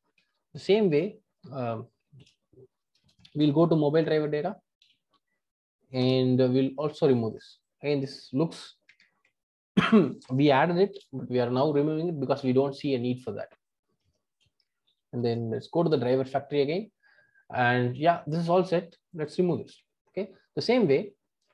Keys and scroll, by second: 2.1 ctrl+alt+o, 10.9 ctrl+alt+o.